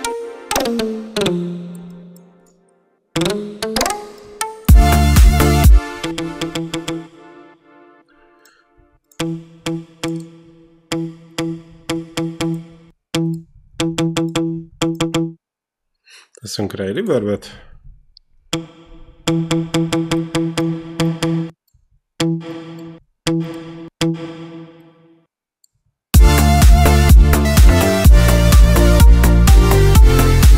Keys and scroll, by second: 4.4 space, 5.8 e, 9.0 e, 17.4 e, 25.9 space.